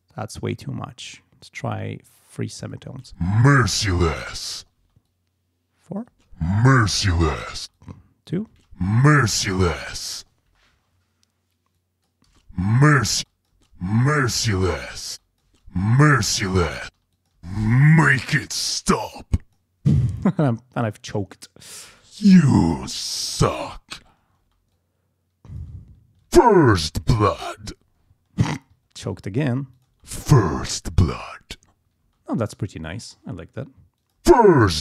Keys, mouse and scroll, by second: 0.0-1.3 drag, 1.7 click, 2.9 space, 4.8 space, 5.1 click, 6.1 space, 7.6 space, 7.7 click, 8.5 space, 10.5 space, 11.7 click, 12.3 space, 13.1 space, 15.1 space, 15.2 click, 16.8 space, 17.1 click, 17.9 ctrl+scroll down 1, 19.0 click, 19.8 space, 20.4-21.9 drag, 21.9 space, 22.1-22.5 ctrl+scroll up 2, 22.9 click, 23.8-24.2 ctrl+scroll down 2, 24.4 ctrl+space, 24.7-25.8 ctrl+drag, 25.8 ctrl+scroll up 2, 26.2 ctrl+space, 26.6 ctrl+scroll down 2, 27.3 ctrl+scroll up 2, 27.8-28.4 ctrl+scroll down 4, 28.5 ctrl+space, 28.8 ctrl+scroll up 2, 29.3 ctrl+scroll down 2, 29.7 ctrl+click, 29.9 ctrl+space, 31.4 ctrl+scroll up 2, 32.0 ctrl+space, 33.3 ctrl+scroll down 2, 34.0 ctrl+click, 34.2 ctrl+space.